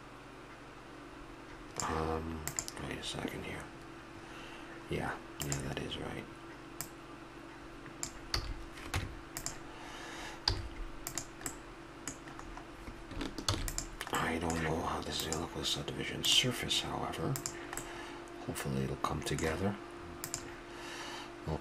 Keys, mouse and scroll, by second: 6.8-8.7 drag, 8.3 a, 8.9 Tab, 10.5 z, 11.6 middle click, 13.5 ctrl+s, 14.4 middle click, 16.3-17.1 drag, 17.4-17.8 drag, 17.8-18.4 middle drag, 18.5-19.2 middle drag, 21.5 click.